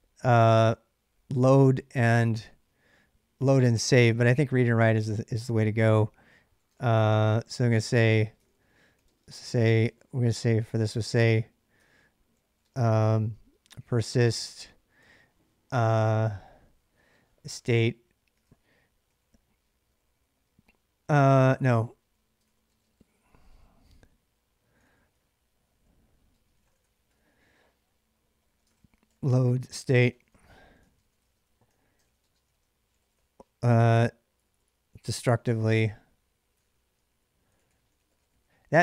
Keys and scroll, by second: 3.9 j, 4.6 k, 6.3-14.8 typing, 9.6 ctrl+[, 9.7 ctrl+j, 16.9-38.8 typing.